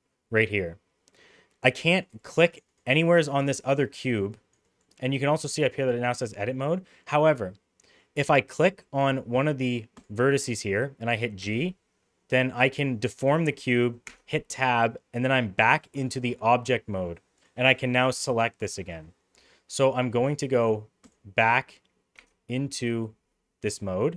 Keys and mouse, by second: 1.7 click, 1.8 click, 2.1 click, 2.5 click, 3.0 click, 3.2 click, 3.7 click, 3.9 click, 4.4 click, 4.7 click, 7.5 middle click, 9.9 click, 11.4 g, 14.0 Tab, 14.5-15.8 middle drag, 22.1 Tab, 23.0 middle click.